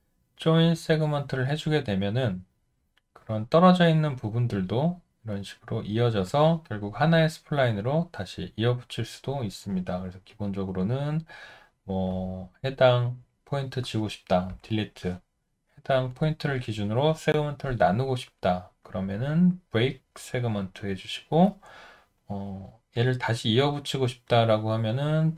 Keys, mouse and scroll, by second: 10.1 alt+middle click, 10.8 alt+right click, 14.5 Delete.